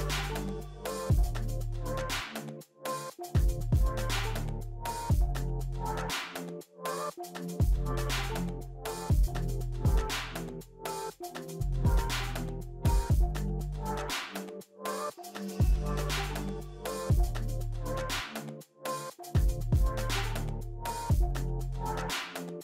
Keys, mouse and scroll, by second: 17.4 2, 17.4 Return, 18.6-19.4 typing.